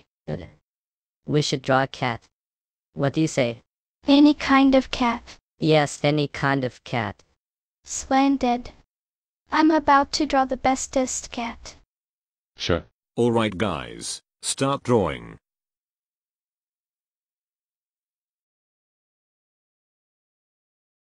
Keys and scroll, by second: 21.0 Up.